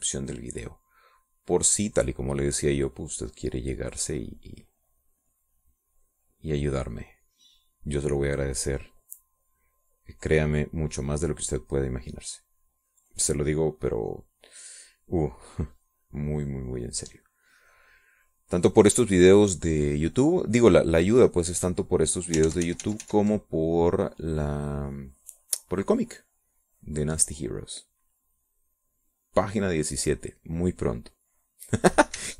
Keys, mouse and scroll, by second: 2.5 middle click, 3.1 middle click, 4.5-9.2 drag, 9.5-11.4 drag, 11.6-15.0 drag, 15.2-18.2 drag, 18.4 middle click, 18.9-20.3 middle drag, 20.4 middle click, 21.5-23.8 drag, 23.9 ctrl+z, 24.9-32.3 ctrl+drag.